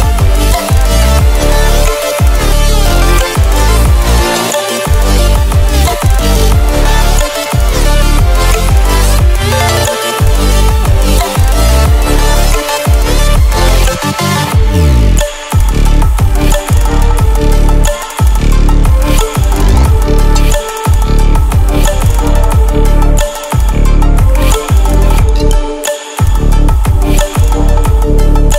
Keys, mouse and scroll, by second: 0.0 ctrl+w, 0.2 ctrl+w, 3.2 ctrl+w, 6.1 click, 8.7 ctrl+w, 10.7 ctrl+w, 11.7 click, 14.1 ctrl+w, 17.1 ctrl+w, 18.0 Down, 27.2 click.